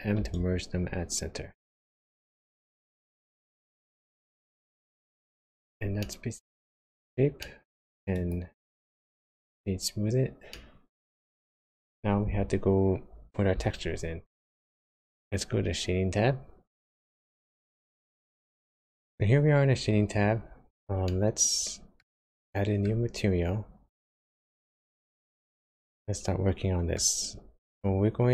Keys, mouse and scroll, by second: 21.1 middle click, 22.3 shift+middle click, 24.1 click, 25.6 middle click, 27.8-28.3 scroll up 3.